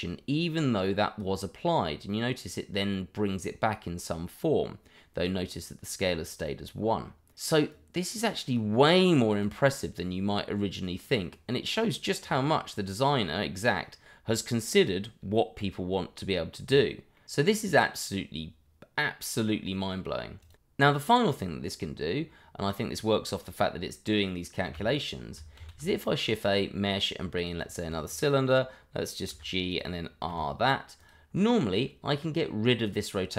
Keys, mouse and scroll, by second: 7.7 click, 16.6 click, 17.1 middle click, 19.1 middle click, 21.1 middle click, 21.8 middle click, 24.8 Delete, 28.2 click, 30.3 r, 31.0 click, 32.0 middle click.